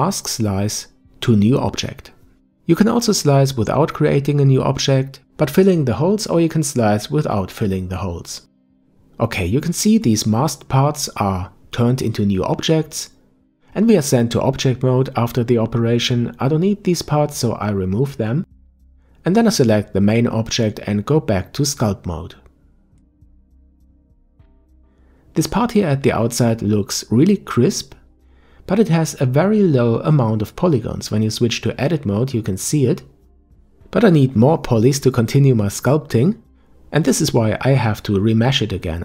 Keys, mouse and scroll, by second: 7.1-10.0 middle drag, 10.0-13.0 drag, 13.0-16.0 middle drag, 17.2-18.1 middle drag, 18.1-19.2 scroll down 1, 19.2 Delete, 20.3 click, 21.2 ctrl+Tab, 23.4-25.1 middle drag, 25.1 alt+m, 26.6-27.6 scroll up 2, 27.9-30.5 middle drag, 30.5 Tab, 35.0 Tab, 37.7-39.0 drag.